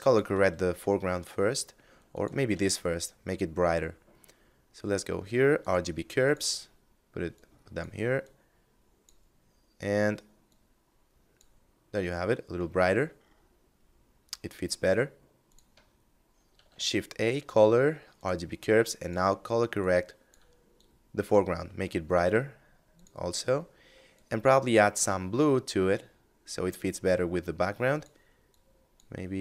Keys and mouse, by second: 1.2 click, 1.7 shift+a, 4.8 click, 9.6 click, 12.0 middle click, 14.6 click, 15.7 shift+a, 17.3 click, 22.0 click, 27.0 click.